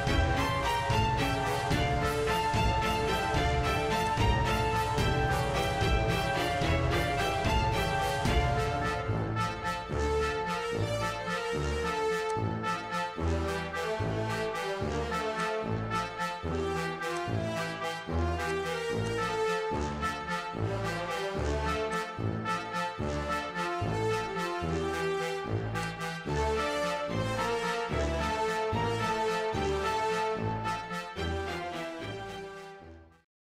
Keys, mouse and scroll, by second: 0.8 click, 1.9 s, 4.0 click, 5.7 click, 14.1 click, 16.5 click, 17.2 click, 17.9 0, 18.5 click, 21.1 click, 24.4 click, 25.8 click.